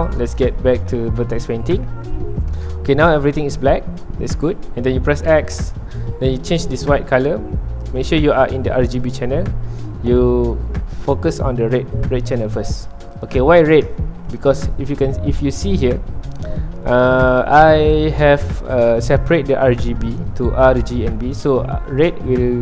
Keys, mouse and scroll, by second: 0.0-1.8 drag, 1.8 ctrl+Tab, 2.4-7.9 middle drag, 7.9 click, 13.1 click.